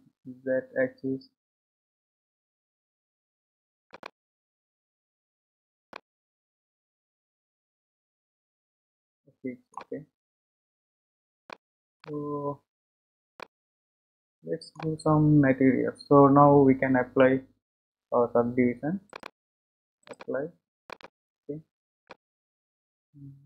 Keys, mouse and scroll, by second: 5.4-5.9 scroll down 2, 5.9-9.0 middle drag, 10.8-11.5 scroll down 4, 11.5 middle click, 12.3-13.2 scroll up 4, 13.5-16.4 middle drag, 19.1-21.1 drag, 22.0-23.4 middle drag.